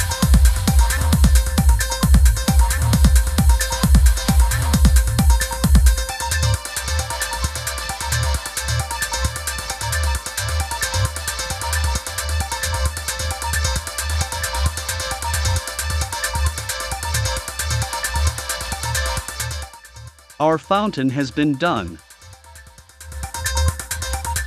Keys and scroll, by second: 13.9 i, 15.5 v.